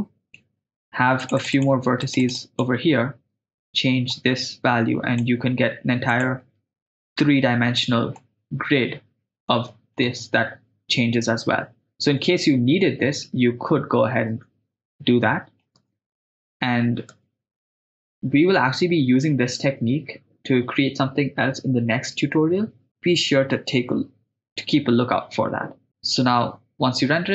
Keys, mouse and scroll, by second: 1.2 click, 1.6 click, 2.2 click, 4.1 click, 5.1 click, 6.1 click, 6.9 click, 8.2-10.0 middle drag, 10.2 shift+space, 14.0 shift+space, 15.0-15.7 ctrl+middle drag, 15.9 shift+space, 17.2 shift+space, 18.0-18.6 ctrl+middle drag, 25.9 middle click.